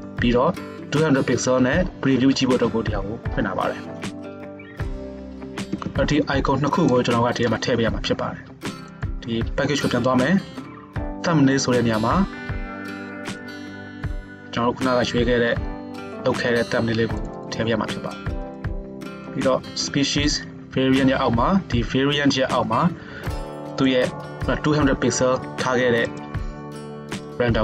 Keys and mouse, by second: 0.0 click, 0.5-5.7 drag, 8.9 middle drag, 9.1-13.5 right drag, 13.5-24.8 middle drag.